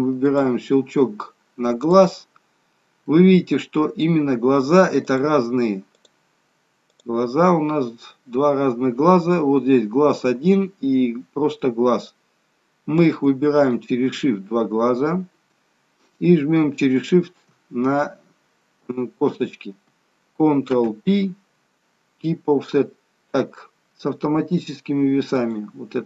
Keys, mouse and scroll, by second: 0.3 click, 1.9 click, 3.1 middle click, 5.1 click, 6.0 click, 6.9 click, 13.7 shift+click, 17.0 shift+click, 20.7 ctrl+p.